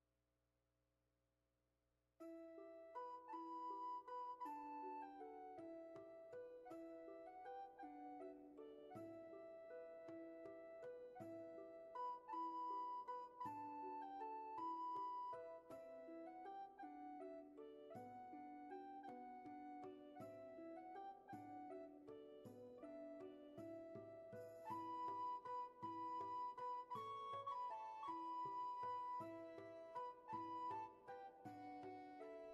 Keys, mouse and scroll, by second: 0.0 ctrl+z, 23.7 ctrl+z, 27.6 ctrl+z, 29.6 ctrl+z.